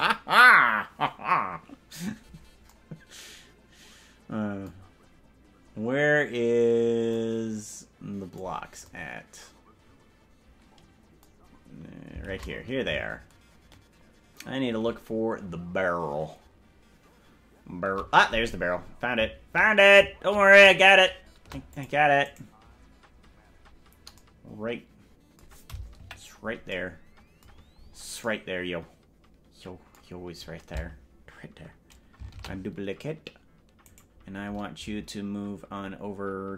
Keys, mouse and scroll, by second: 11.6-12.0 scroll down 7, 12.4 shift+`, 16.6 shift+middle click, 22.6 right click, 26.2 KP_Decimal, 27.6-28.2 scroll down 11, 28.0 scroll up 1, 33.4 shift+d, 35.4 scroll down 1, 35.6-36.0 scroll down 2.